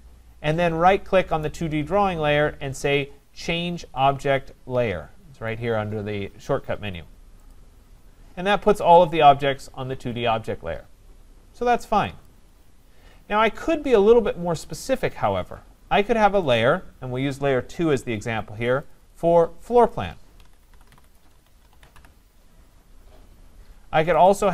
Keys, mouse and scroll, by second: 1.4 right click, 3.6-4.6 right drag, 7.5 click, 12.3 click, 16.6 click, 18.9 click, 19.1 click, 19.9 click, 20.2-22.5 typing, 24.3 click.